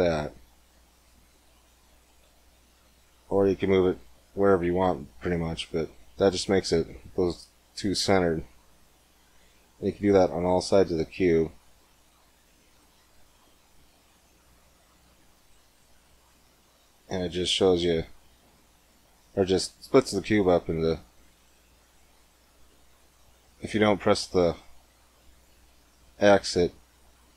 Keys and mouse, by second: 8.7-10.5 drag, 9.9 ctrl+r, 13.2 s, 16.3 click, 17.3 ctrl+r, 21.5 s.